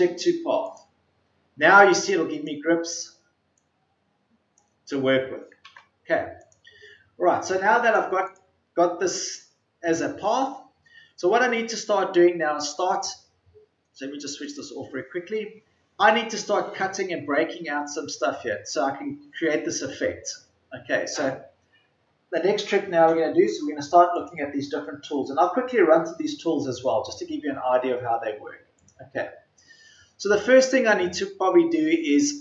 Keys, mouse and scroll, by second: 3.2 ctrl+z, 5.3 ctrl+z, 8.2 ctrl+z.